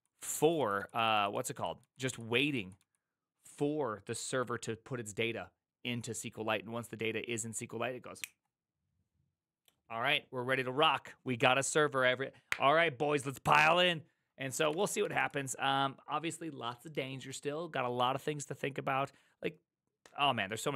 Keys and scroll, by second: 0.0-1.8 typing, 14.4-15.5 typing.